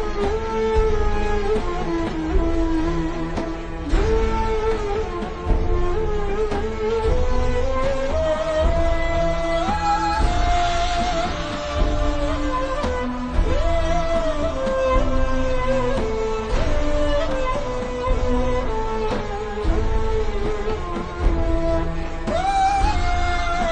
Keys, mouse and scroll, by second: 1.3 click, 2.7 KP_1, 3.6 KP_Enter, 4.8 click, 5.4-6.0 scroll down 1, 7.0 alt+shift+scroll up 1, 7.5 click, 8.3-8.7 alt+shift+scroll up 2, 8.7 click, 10.9 p, 11.6 click, 15.0 click, 15.3-16.7 alt+shift+scroll down 3, 18.0 alt+shift+scroll down 2, 18.4-19.1 scroll up 1, 19.2-19.5 alt+shift+scroll down 1, 19.7-20.1 scroll down 1, 20.1 click, 21.0 alt+click, 22.3-23.4 alt+shift+scroll up 2, 23.4 click.